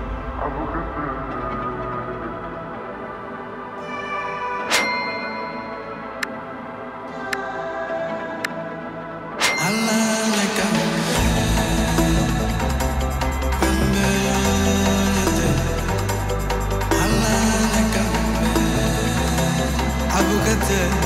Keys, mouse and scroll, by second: 0.5-3.6 typing, 5.1 click, 7.0 Return, 8.7-10.8 drag, 12.2 right click, 15.1 click, 17.2 right click, 18.8 click.